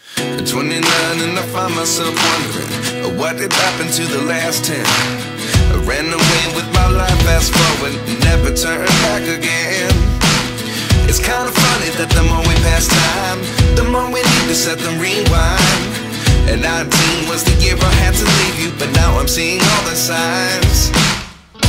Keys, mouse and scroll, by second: 1.3 alt+BackSpace, 3.0 ctrl+d, 17.3-20.4 alt+drag.